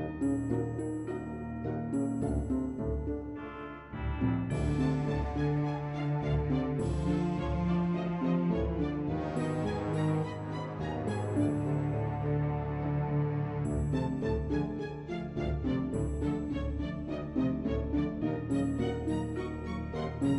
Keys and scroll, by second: 19.5 b.